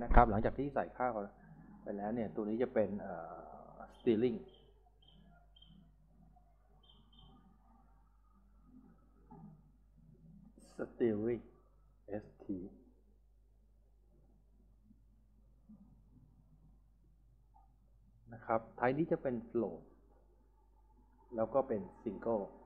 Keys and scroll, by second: 3.9 shift+s, 4.9 w, 5.6 BackSpace, 5.7 r, 7.7-9.4 typing, 12.0-18.0 typing.